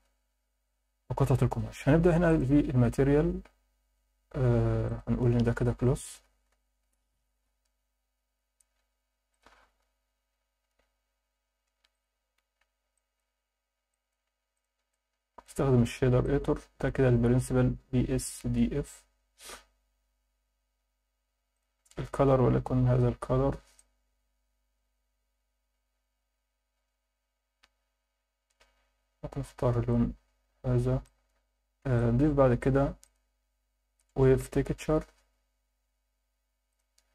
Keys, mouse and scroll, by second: 0.0 scroll up 1, 1.0-2.2 scroll down 1, 2.2 click, 4.8-6.8 drag, 9.3-12.0 drag, 12.9 alt+shift+middle click, 13.5 scroll up 1, 13.9 alt+shift+middle click, 14.5 click, 14.9 click, 16.2 click, 17.2-19.3 scroll up 1, 21.5 click, 30.6 scroll down 2, 31.0 alt+shift+middle click, 32.0 alt+shift+middle click, 32.6 shift+a, 33.1-33.7 scroll down 1.